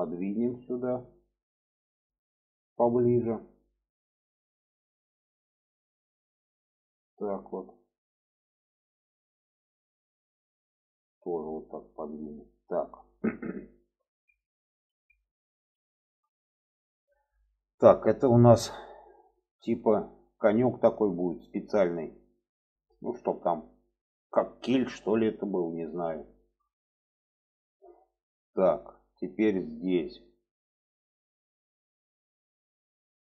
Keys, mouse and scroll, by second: 0.0 click, 1.8 click, 2.1 middle click, 2.7 middle click, 3.6 shift+middle click, 4.7 click, 6.2 click, 6.7-8.3 drag, 8.7 shift+middle click, 10.3 click, 10.9 click, 12.2 click, 13.9 alt+z, 14.2 middle click, 15.0 middle click, 15.8 shift+middle click, 16.4-18.1 middle drag, 18.4 shift+middle click, 19.2 shift+middle click, 20.4 shift+middle click, 21.4 shift+middle click, 22.1 shift+middle click, 22.8 middle click, 23.9-25.6 middle drag, 26.1 shift+middle click, 26.9 middle click, 27.6 middle click, 29.0 shift+middle click, 29.6 shift+middle click, 30.3-30.9 middle drag, 31.2 shift+middle click, 31.9 middle click, 32.5 shift+middle click.